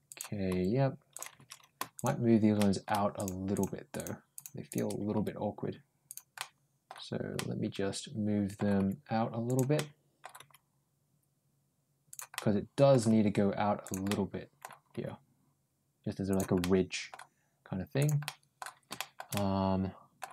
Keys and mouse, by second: 0.0 click, 0.3 g, 2.4 middle click, 3.0 click, 3.4 click, 3.8 click, 4.5 ctrl+shift+click, 5.0 ctrl+g, 6.2 middle click, 7.2-8.4 middle drag, 8.6 g, 9.6 middle click, 10.2 g, 12.2 middle click, 12.9 g, 13.9 middle click, 14.8 g, 16.4 middle click, 17.9 click, 18.1 middle click, 18.8 shift+middle click, 19.2 middle click.